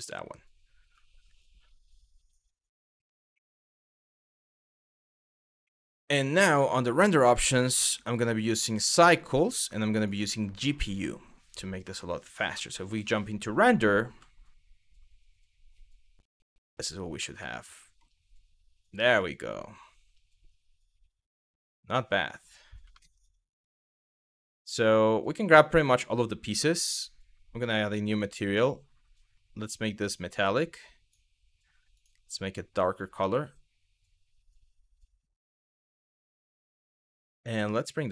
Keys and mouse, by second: 5.3 middle click, 6.3 click, 7.7 click, 8.0-8.9 drag, 9.6-10.5 drag, 11.1 click, 12.2 z, 17.1-17.6 middle drag, 18.7-19.7 middle drag, 22.5 shift+middle drag, 24.9 click, 26.5 click, 27.2 click, 29.8-30.7 drag, 31.5 click, 37.8-38.1 drag.